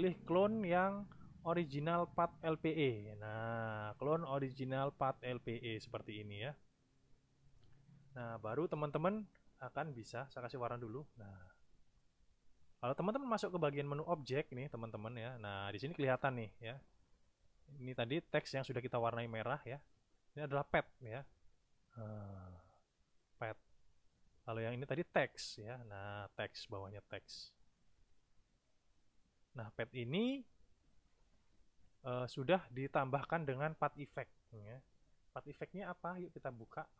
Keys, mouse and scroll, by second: 5.3 click, 10.6 click, 14.0 click, 14.6 click, 16.9 click, 17.5 click, 24.9 click, 27.2 click, 27.6 click, 28.2 click, 28.5 click, 28.9 click, 36.0 click.